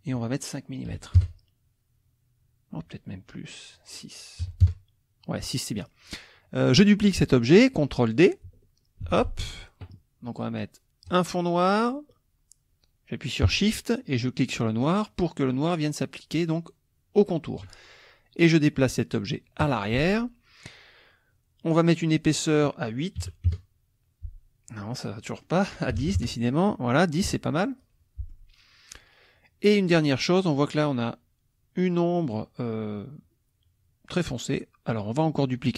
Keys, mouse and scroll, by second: 0.1 click, 0.9 5, 1.2 Return, 3.7 click, 4.4 KP_6, 4.6 KP_Enter, 9.0 ctrl+d, 11.0 click, 14.9 shift+click, 19.7 click, 22.4 click, 23.2 KP_8, 23.5 KP_Enter, 25.2 click, 25.7-26.5 typing, 27.5 click.